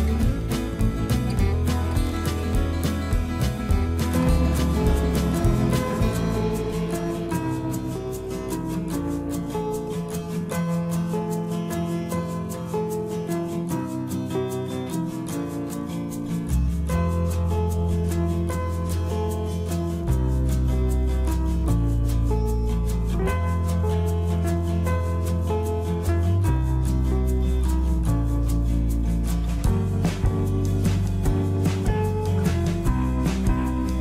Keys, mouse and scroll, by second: 6.1 s, 15.2 click, 16.5-24.0 middle drag, 24.0 x, 25.7 f, 27.9-32.8 middle drag, 32.8 click.